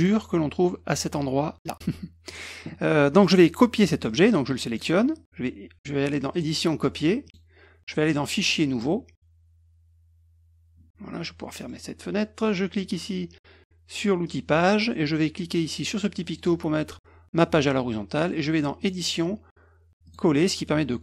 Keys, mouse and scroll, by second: 2.2 click, 4.0 click, 4.6 click, 6.3 click, 7.2 click, 8.1 click, 8.7 click, 11.5 middle click, 14.2 click, 16.2 click, 18.8 click, 20.0 click.